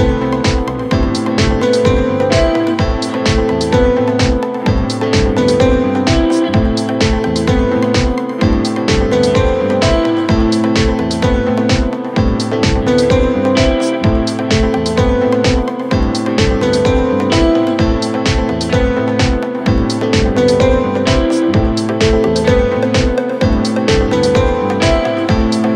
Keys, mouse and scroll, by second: 3.1 Down, 3.4 Down, 3.9 Down, 4.2 Down, 12.1 Down, 12.5 Up, 12.7 Up, 12.8 Up, 13.0 Up, 13.5 Up, 17.2 ctrl+t, 22.2 Down, 22.7 Down, 24.4 Return.